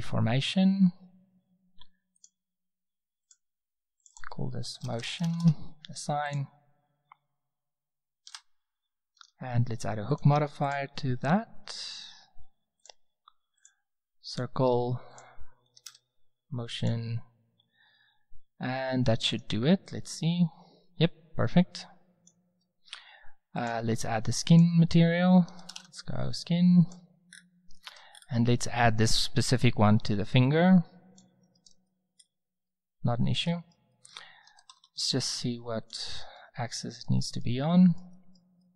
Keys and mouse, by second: 2.2-6.0 drag, 6.2-7.9 drag, 8.2 Tab, 9.1 click, 13.6-16.9 drag, 19.3-19.8 drag, 19.8 middle click, 30.4-31.4 drag, 31.4-31.9 middle drag, 33.0 s, 34.4 s.